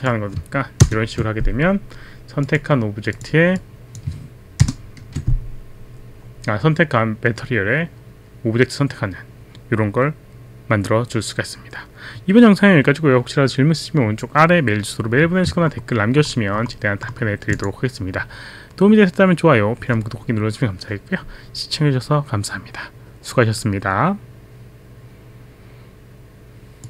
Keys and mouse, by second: 0.9 ctrl+Return, 2.4 click, 3.2 click, 3.6 click, 4.0 click, 4.6 ctrl+Return, 17.5 click.